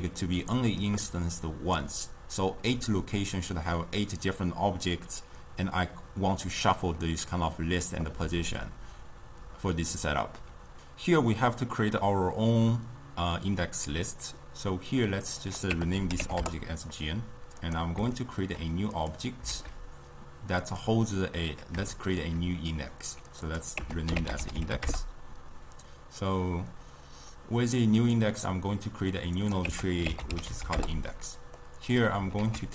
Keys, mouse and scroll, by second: 0.3 d, 0.5-5.7 middle drag, 15.3 click, 15.5-17.8 drag, 18.2 shift+middle click, 19.0 click, 19.5 shift+a, 22.0-23.3 shift+middle drag, 23.3 click, 23.5-26.6 drag, 28.0-31.6 drag, 31.6 middle click, 32.5 ctrl+a.